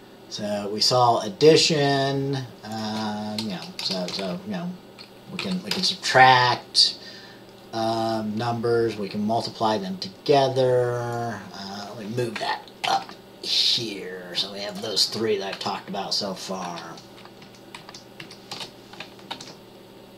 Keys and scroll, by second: 3.9 BackSpace, 5.8 BackSpace, 13.0 ctrl+x, 16.7 ctrl+v, 18.6 Return, 19.4 ctrl+s.